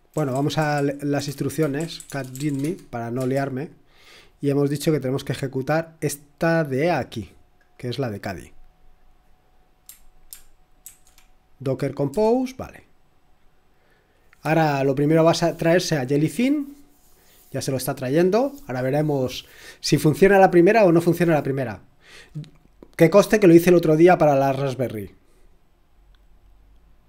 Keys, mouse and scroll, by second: 0.0-3.1 typing, 3.2 Return, 5.6 click, 6.9 click, 7.6-10.8 drag, 10.6-11.3 typing, 12.1 Return.